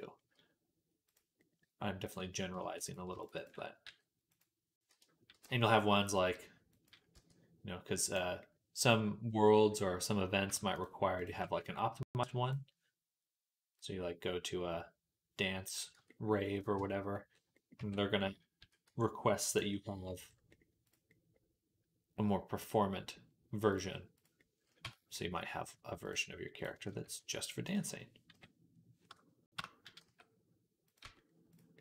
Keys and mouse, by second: 0.9-1.9 drag, 2.7 click, 2.7 middle click, 3.0 alt+shift+click, 3.0 alt+shift+middle click, 3.7 f, 5.1 i, 7.0 e, 10.6 alt+shift+click, 10.6 alt+shift+middle click, 12.1-19.5 drag, 12.1-19.5 middle drag, 15.8 Tab, 16.6 Tab, 17.6 Tab, 18.4 s, 23.6 click, 23.6 middle click, 24.7 Tab, 25.9 click, 25.9 middle click, 26.9 e, 27.6-31.8 middle drag, 28.1 ,, 30.9 Tab, 30.9 s.